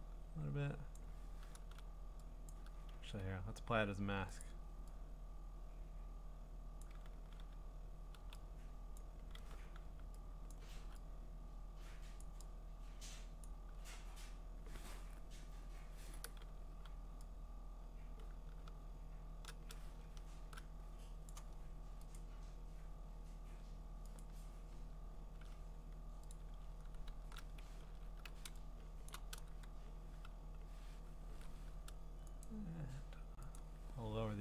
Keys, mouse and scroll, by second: 0.0 !, 0.3 ~, 0.9 click, 1.6 ctrl+z, 2.5 click, 2.9 ctrl+z, 4.4 click, 6.8 click, 8.2 x, 9.0 click, 9.5 d, 10.5 click, 10.9 x, 12.2 click, 13.5 click, 16.7 v, 21.3 click, 22.2 click, 24.2 click, 25.2 scroll, 26.3 click, 27.9 ctrl+alt+f, 29.0 ctrl+alt+f, 29.1 click, 32.5 click, 33.6 click.